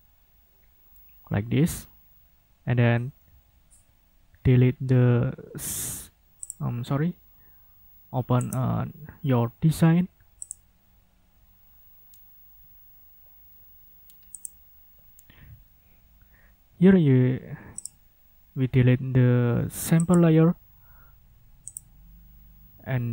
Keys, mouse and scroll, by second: 6.4 click, 8.5 right click, 10.4 click, 14.3 click, 17.8 click, 20.0 click, 21.7 click.